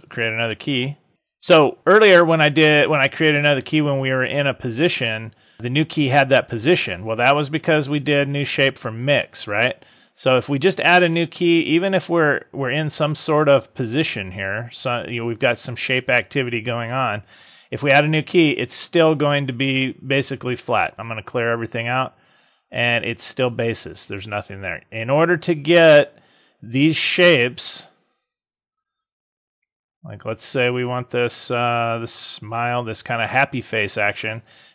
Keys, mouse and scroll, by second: 7.9 click, 18.3 click, 20.8 click, 22.7 click, 27.2 click, 29.5 click, 32.0 click, 34.4 click.